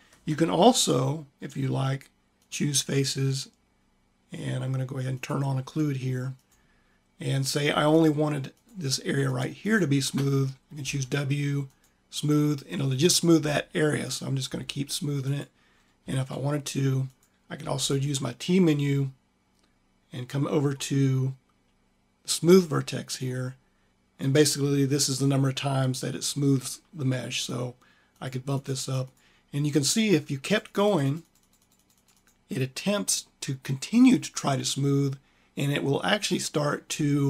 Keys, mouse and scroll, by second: 4.3 click, 10.7 w, 13.2 w, 14.4 w, 17.0 w, 17.4 t.